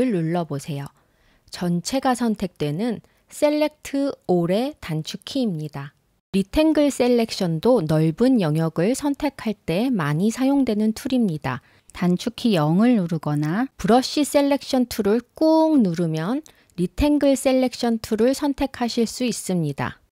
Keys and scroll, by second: 1.9 super+a.